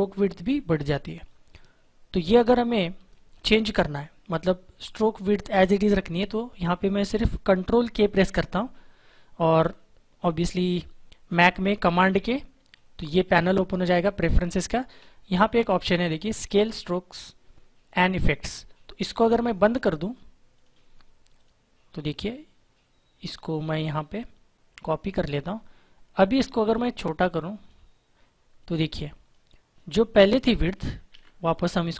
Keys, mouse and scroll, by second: 12.1 ctrl+k, 14.2 click, 19.5 click, 23.4 alt+click, 26.1 shift+click, 31.0 ctrl+z.